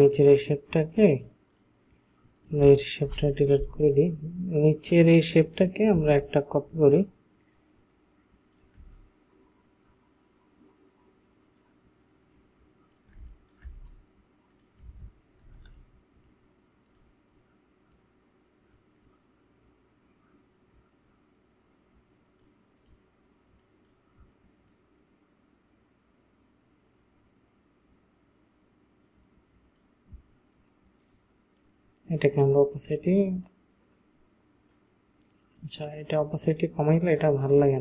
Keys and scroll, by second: 3.1 Delete, 13.2 space, 15.4 ctrl+t.